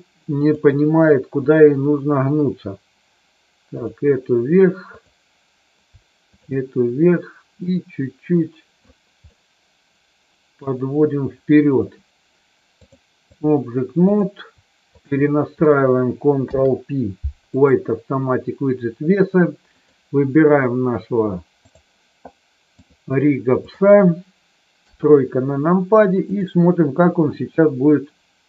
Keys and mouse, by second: 0.4 click, 1.4 shift+click, 3.6 click, 4.8 click, 6.4 shift+click, 7.6-8.8 drag, 9.3-10.6 middle drag, 12.8 click, 14.0 click, 14.8 shift+click, 16.4 ctrl+p, 19.6 click, 21.6 click, 22.8-23.8 drag, 24.9 KP_3, 26.3 click, 27.9-28.4 drag.